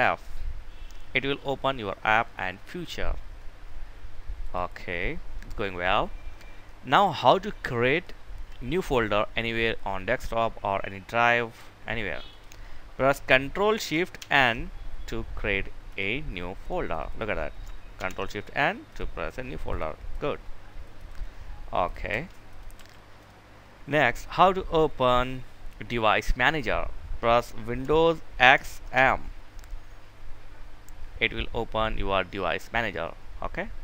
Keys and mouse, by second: 3.7 click, 3.9 click, 13.5 ctrl+shift+n, 15.2 click, 17.3 ctrl+n, 18.1 click, 21.4 Delete, 21.8 click, 22.0 Delete, 22.4 click, 27.9 super+x.